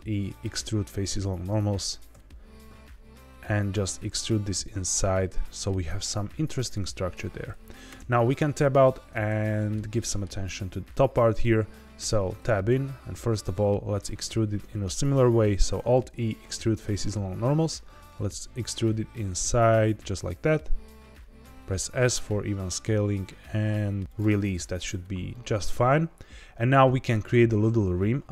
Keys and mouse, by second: 2.1 s, 6.7 click, 7.8 Tab, 8.6-9.2 drag, 9.4-9.7 shift+middle drag, 10.0 middle click, 11.9 Tab, 12.6 a, 13.2 middle click, 15.7 alt+e, 21.4 s, 24.0 click, 25.3 middle click.